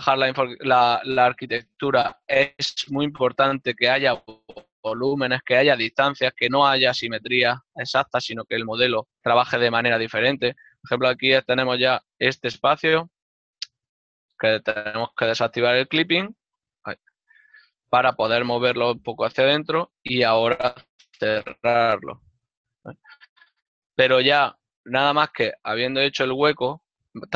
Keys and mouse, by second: 0.9 click, 1.7 g, 3.5 shift+click, 6.0 shift+middle click, 7.8 g, 9.4 shift+click, 9.8 shift+middle click, 11.6 right click, 12.6 ctrl+Tab, 13.7 shift+middle click, 13.9 right click, 14.1 shift+right click, 15.2 click, 15.7 z, 19.9 shift+click, 22.1 f, 22.3 ctrl+middle click, 25.6 Tab, 25.6 click.